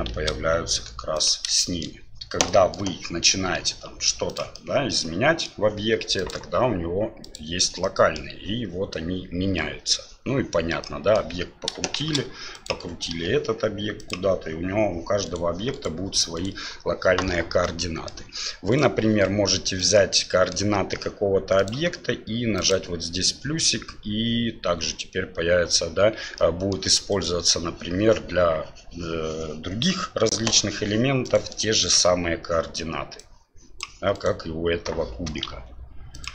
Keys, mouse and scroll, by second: 0.1 shift+a, 1.6 shift+middle drag, 2.6 middle drag, 3.5 r, 4.7 middle click, 5.5 scroll down 1, 6.3-7.7 drag, 7.8 scroll up 1, 7.9 middle click, 8.9 scroll up 1, 9.0-9.9 middle drag, 11.0 middle click, 12.0 shift+d, 13.1 r, 15.2 right click, 15.7 right click, 16.4 right click, 17.6-18.1 middle drag, 18.7 right click, 19.8-20.6 middle drag, 21.7-26.3 drag, 26.4-26.8 middle drag, 26.4 scroll up 1, 26.7 scroll down 1, 27.1 right click, 31.2 right click, 31.8 right click, 33.2 click, 34.1 right click, 35.4 r.